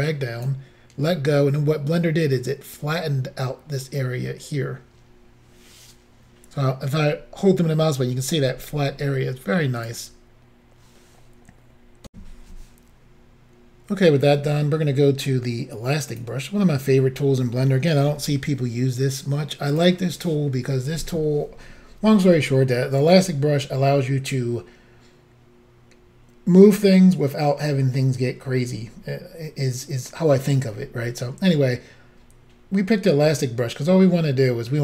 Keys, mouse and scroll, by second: 6.8 middle click, 9.9 click, 12.1 Insert, 16.1 click, 18.1 f, 19.8 click.